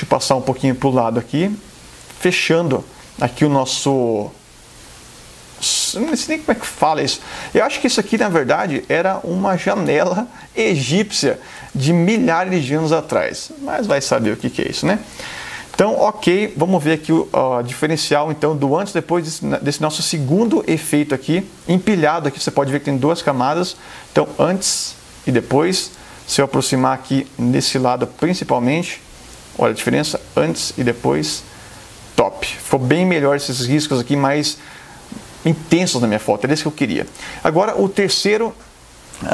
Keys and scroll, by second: 6.0 space, 8.7 super+space, 8.9 super+-, 11.8 super+=, 13.7 space, 20.3 space, 26.9 super+=, 28.0 super+space, 37.2 super+0.